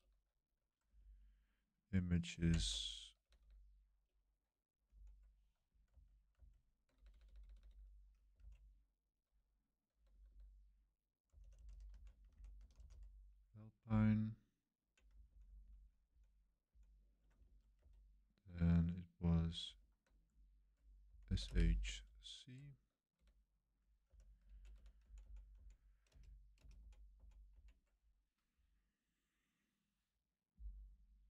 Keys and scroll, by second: 0.9 Right, 1.2-3.3 typing, 2.4 Right, 4.9 Left, 5.9 super+z, 6.3 super+z, 6.9-15.9 typing, 13.9 Tab, 16.0 Left, 16.7 Left, 17.4 super+1, 17.8 super+3, 19.6 super+1, 20.8-27.5 typing, 24.5 Right, 25.0 Left, 25.2 Left.